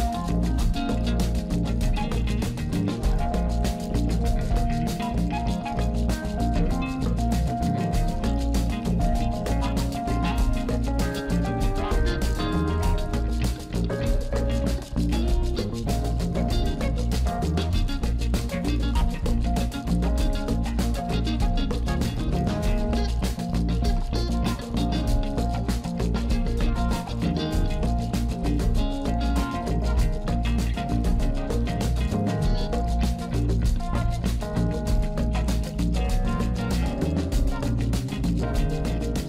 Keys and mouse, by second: 3.1-4.2 drag, 4.9-7.2 drag, 10.5-12.9 drag, 15.1 click, 23.0 KP_0, 24.3-25.1 middle drag, 25.8 middle click, 26.3 click, 27.1 g, 28.3-29.4 middle drag, 29.6 KP_3, 30.7 g, 31.6 KP_0, 37.3 shift+a.